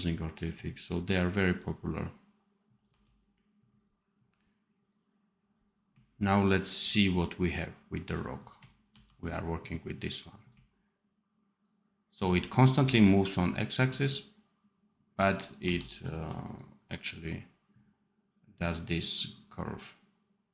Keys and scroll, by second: 2.8 d, 8.8 d, 12.6 d, 15.5 d.